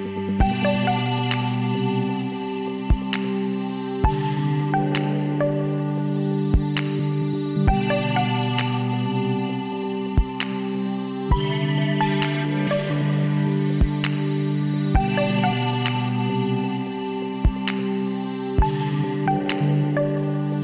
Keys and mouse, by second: 0.8 KP_7, 2.8 ctrl+r, 5.8 s, 9.0 z, 10.8 s, 16.3 z, 19.5-20.6 drag.